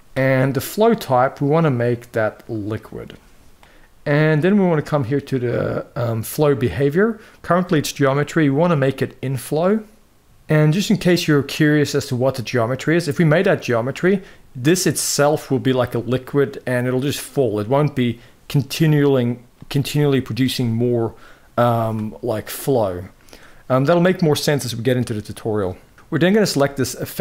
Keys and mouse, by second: 0.6-2.4 drag, 6.5-10.2 drag, 11.2-13.7 drag, 25.9 middle click.